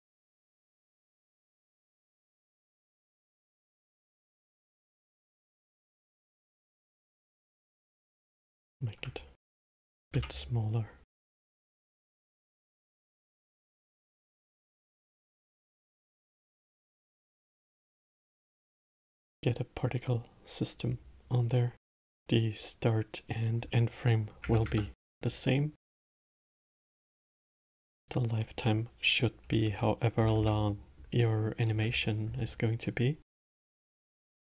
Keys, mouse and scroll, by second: 0.8 n, 3.0 click, 3.9 scroll down 2, 5.7 n, 6.6 Tab, 8.3 alt+click, 8.8 alt+click, 10.5 s, 12.7 Tab, 14.5-15.0 middle drag, 15.0-15.4 scroll up 1, 15.4-19.2 middle drag, 19.2 click, 20.4-23.4 drag, 23.6-26.6 drag, 28.4-30.7 drag, 30.7 KP_0.